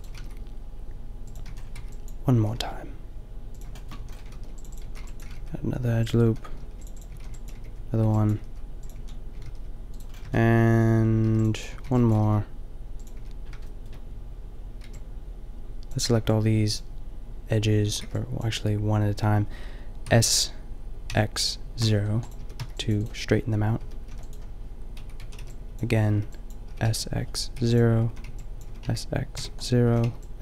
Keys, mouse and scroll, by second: 0.2 g, 1.4 click, 1.5 a, 1.8 b, 2.5 g, 4.0 a, 4.3 ctrl+r, 4.8 a, 4.9 b, 5.2 g, 6.3-9.0 typing, 6.7 ctrl+r, 8.8 click, 9.5 ctrl+r, 10.2 middle click, 11.3 ctrl+r, 11.6 middle click, 11.7 a, 11.8 b, 12.1 g, 12.5 click, 13.1 a, 14.9 b, 16.1 b, 17.8 a, 18.1 b, 20.0 s, 22.4 s, 23.8 s, 24.2-25.2 drag, 25.2 a, 25.5 n, 26.1 b, 26.7 s, 28.1 a, 28.3 b, 28.6 s, 29.8 a, 30.0 b.